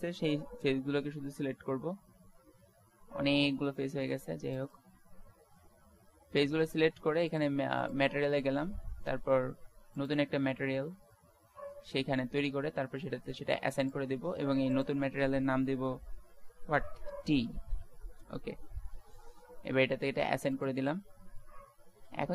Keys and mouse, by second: 2.8 c, 5.0 Tab, 5.7 Tab, 21.7 Tab.